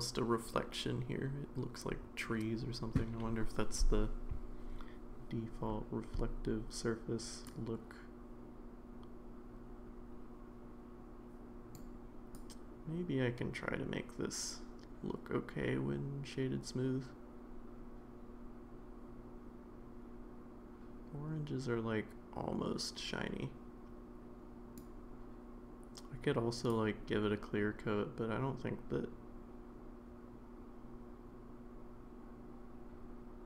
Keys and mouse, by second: 7.5-11.7 drag, 12.4-24.8 drag, 27.0-33.4 drag.